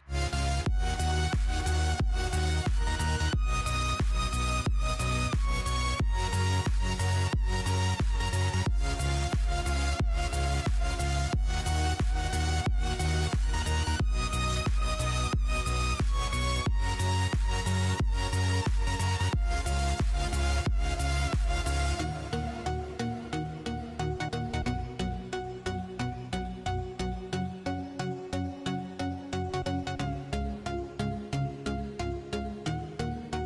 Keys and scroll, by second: 1.2-6.2 typing, 5.0 Tab, 8.0-9.5 typing, 11.3-13.5 typing, 14.5 Tab, 14.6-15.5 typing, 16.9-17.8 typing, 19.2-22.9 typing, 21.8 Tab, 22.9 Down, 23.3 Tab, 25.5-26.4 typing, 28.2-29.1 typing, 32.7-33.4 typing.